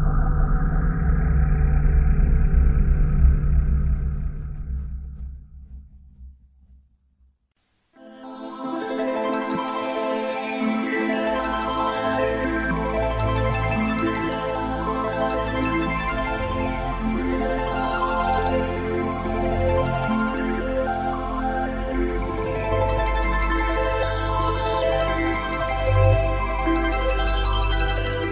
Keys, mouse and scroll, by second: 2.0 click, 3.1 middle click, 6.6 click, 8.5 middle click, 13.6 middle click, 18.5 middle click, 25.6 middle click, 28.0 click.